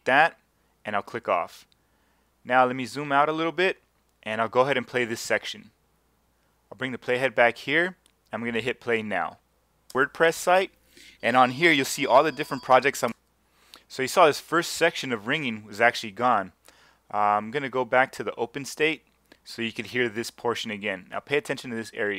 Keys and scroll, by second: 9.9 space, 13.1 space.